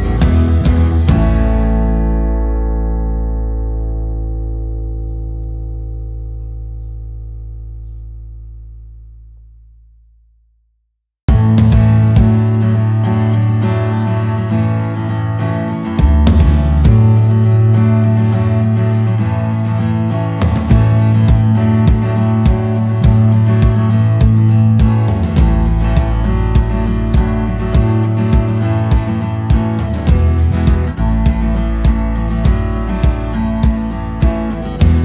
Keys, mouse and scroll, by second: 0.6 middle click, 1.8 middle click, 2.5 i, 4.5 middle click, 4.8 scroll up 1, 5.0 middle click, 6.0 scroll down 1, 6.3 alt+e, 9.3 middle click, 10.0 i, 12.3 middle click, 13.2 alt+e, 15.5 click, 15.7 middle click, 16.1 scroll up 2, 16.5 middle click, 17.7 ctrl+z, 17.9 ctrl+z, 18.2 middle click, 18.5 click, 18.7 middle click, 24.0 click, 24.9 click, 26.4 click, 27.3 middle click, 27.9-28.3 scroll down 2, 28.5 click, 29.4 click, 29.7 middle click, 30.5 click, 31.1 c, 32.7 middle click, 33.7 c.